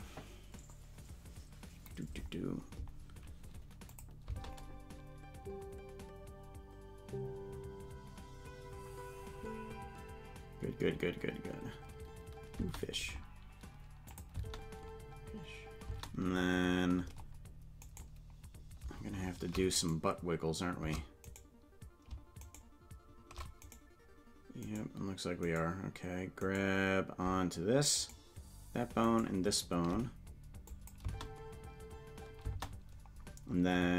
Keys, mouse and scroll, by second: 4.0 click, 4.2 space, 12.7 space, 14.2 click, 14.3 space, 18.2 right click, 18.2 space, 20.8 right click, 21.5 right click, 22.7 shift+right click, 22.8 shift+right click, 23.9 right click, 27.2 shift+right click, 28.2 right click, 30.7 click, 31.0 space.